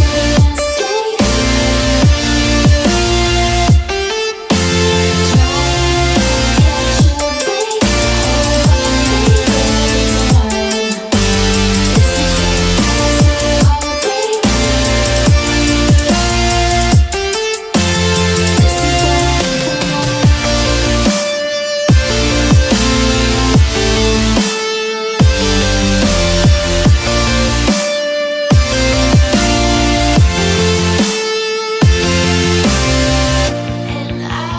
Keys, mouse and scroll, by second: 1.5 right click, 2.9 click, 5.9 click, 6.5 click, 9.2 click, 11.0 click, 12.4 click, 14.1 click, 17.9 click, 19.0 right click, 21.6 click, 22.6 click, 23.7 click, 28.9 click, 32.8 ctrl+shift+j.